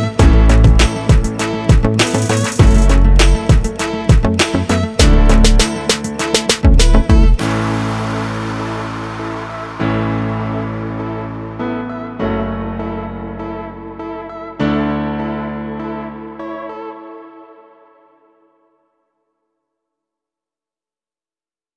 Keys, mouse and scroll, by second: 1.4 click, 1.7 right click, 2.2 s, 3.3 click, 3.6 scroll up 2, 4.1 click, 4.5 click, 9.9 click, 11.3 click, 11.9 click, 12.4 scroll down 4, 12.9 click, 14.1 click, 14.8-15.7 scroll down 4, 15.7 click, 16.2 click, 16.4 click, 18.0-19.4 scroll up 11.